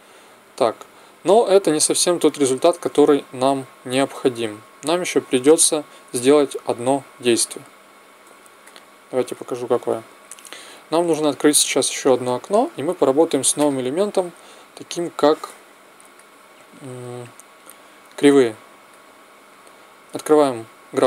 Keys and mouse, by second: 1.6 Escape, 2.9 alt+a, 4.7 Escape, 5.9 alt+a, 7.8 Escape, 12.5 t, 14.6-16.5 drag.